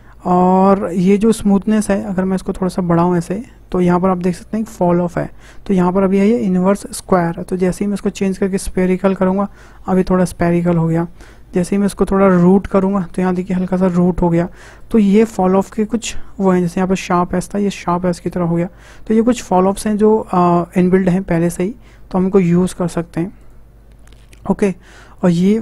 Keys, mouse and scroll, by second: 2.4-5.4 drag, 7.5-10.5 drag, 11.2-13.6 drag, 13.6-14.8 middle drag, 14.8-17.8 drag, 19.3-21.4 drag, 21.4-22.9 middle drag, 22.9-25.6 drag.